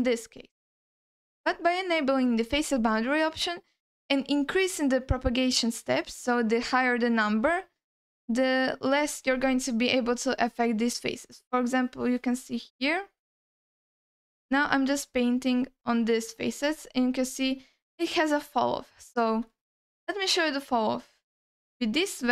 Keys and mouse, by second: 1.4-8.9 drag, 11.2-12.2 drag, 12.7 alt+middle click, 13.4-17.3 drag, 18.4 alt+middle click, 19.2 alt+shift+middle click, 19.6 alt+middle click, 20.1 alt+shift+middle click, 21.6 click, 22.2-22.3 drag.